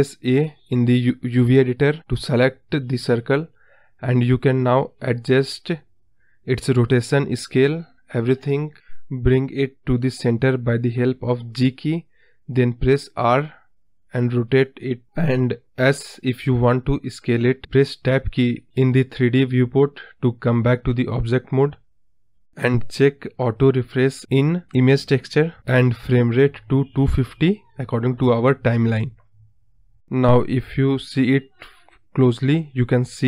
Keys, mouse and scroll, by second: 2.8 s, 3.7 ctrl+z, 4.8 r, 11.8 s, 16.5 Tab, 22.9 click, 27.9-32.8 drag, 32.8-33.2 scroll up 4.